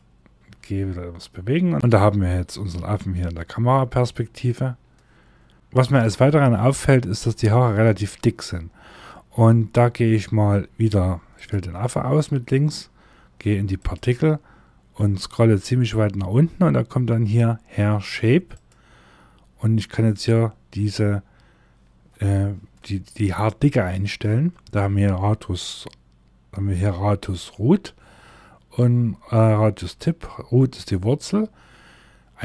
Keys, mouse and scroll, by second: 0.2 g, 4.6 scroll up 2, 5.5 shift+middle click, 6.2-6.9 scroll up 1, 10.9 click, 13.6 scroll down 1, 17.7 click, 18.3 scroll down 1, 31.8 click.